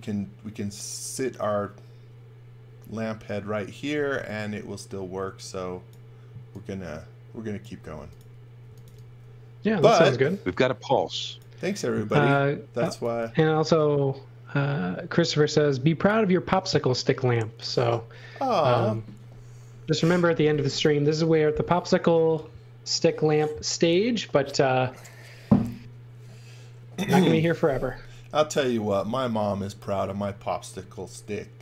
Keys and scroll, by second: 3.7-4.6 typing, 7.9-9.4 typing, 12.8 x, 13.1 v.